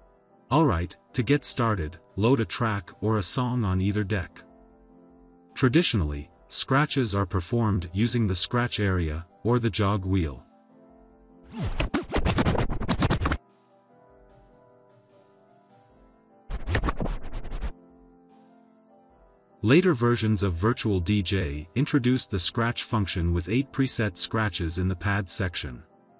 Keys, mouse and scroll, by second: 2.5-3.0 drag, 10.5 click, 11.3-13.4 drag, 16.4 click, 24.8 click.